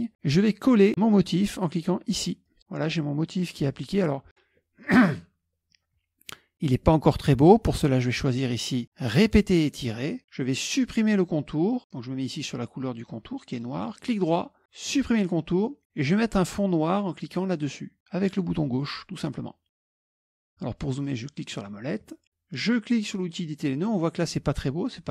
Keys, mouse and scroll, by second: 2.5 click, 8.4 click, 9.2 click, 14.9 click, 19.0 click, 20.1 middle click, 21.1 middle click, 21.1-21.5 scroll down 2, 21.5-21.9 scroll up 1, 23.2 click.